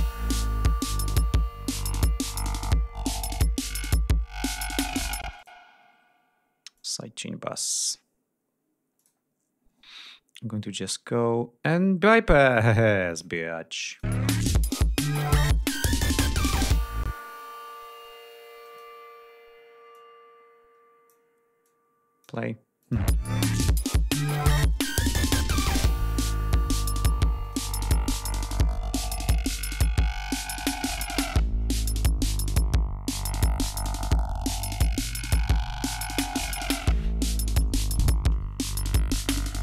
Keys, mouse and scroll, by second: 0.5-1.4 ctrl+scroll up 4, 2.4-3.1 scroll up 4, 4.1-4.7 scroll up 2, 5.3 space, 5.4 click, 6.8 click, 9.0 click, 11.7 click, 12.9 click, 13.9 ctrl+click, 14.1 space, 14.2 ctrl+scroll up 2, 14.6 ctrl+d, 17.1 space, 18.7 click, 20.0-21.3 drag, 21.7 click, 22.8 click, 23.0 space, 23.2 ctrl+scroll up 2, 23.7 ctrl+scroll down 2, 24.8 click, 27.4 click, 28.1 ctrl+scroll down 2, 29.0-29.6 ctrl+scroll down 4, 29.6-30.1 ctrl+scroll up 2, 30.3-31.2 ctrl+scroll down 5, 31.5-31.9 scroll down 2, 32.2-32.9 ctrl+scroll down 4, 33.1-34.1 ctrl+scroll up 6, 34.8 ctrl+scroll down 2.